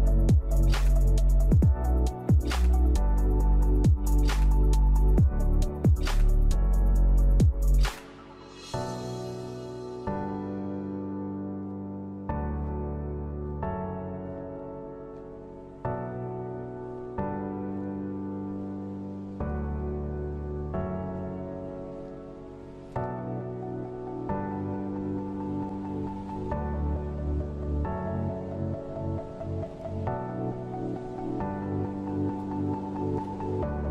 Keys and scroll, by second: 18.3 Up, 18.9 Up, 30.9 shift+Right, 31.1 shift+Right, 31.3 shift+Right.